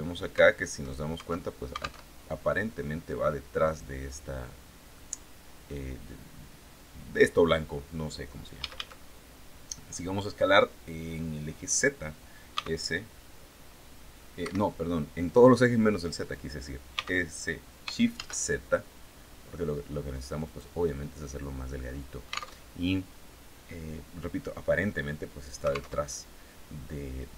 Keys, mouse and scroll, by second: 1.5 alt+Tab, 4.4 click, 8.0 a, 12.0 s, 13.8 Escape, 16.4 s, 17.6 shift+z, 19.9 click, 20.3-22.0 drag, 22.0 alt+Tab, 25.4 alt+Tab.